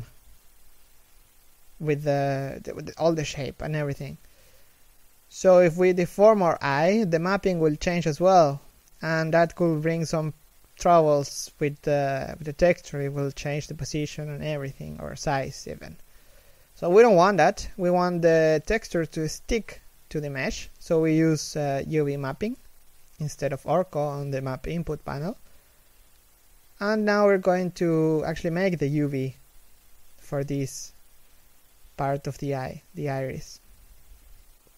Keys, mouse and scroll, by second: 3.3 s, 3.7 a, 4.3 s, 20.2 scroll up 1, 21.2 Tab, 21.5 a, 21.7 middle click, 22.2 scroll up 1, 23.2 l, 25.0 g, 26.5 h, 27.0 middle click, 27.6 alt+right click, 29.2 l, 29.6 scroll up 1, 29.7 a, 30.7 alt+right click, 32.2 ctrl+=, 33.8 scroll down 1, 34.1 middle click.